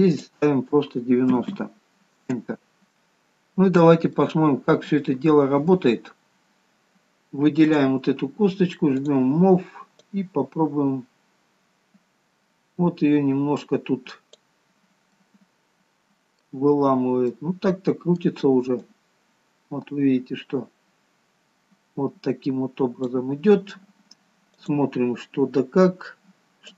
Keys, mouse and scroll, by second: 0.4 click, 4.0-4.4 scroll up 2, 4.4 middle click, 5.7-7.0 scroll down 1, 7.0 scroll down 1, 7.8 click, 14.9-16.7 scroll up 4, 15.4 middle click, 16.7-17.5 scroll down 4, 17.5 middle click, 19.1 click, 24.7 click.